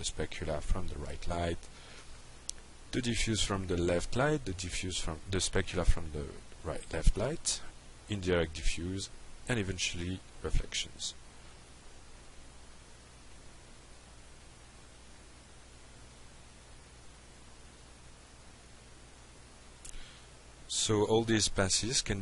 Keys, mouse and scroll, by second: 0.4-0.8 drag, 2.4-3.4 drag, 4.6 click, 7.5 drag, 10.0 click, 15.9 drag.